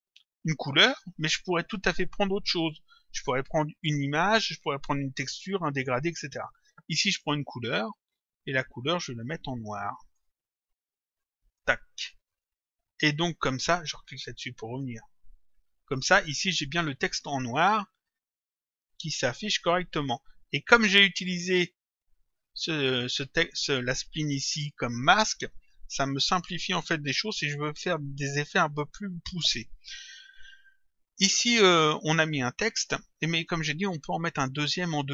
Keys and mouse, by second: 7.1 click, 8.8 click, 10.1 click, 11.3 click, 12.3 click, 14.7 click, 17.5 click, 19.2 click, 31.1 click.